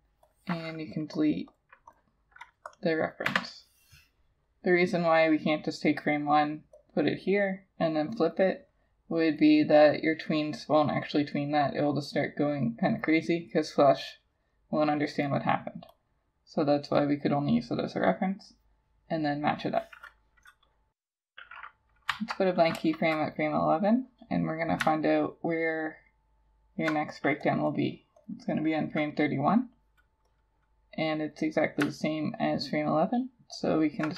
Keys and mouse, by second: 1.5 double click, 22.1 F7, 25.2 alt+click, 27.7 double click, 32.1 alt+click.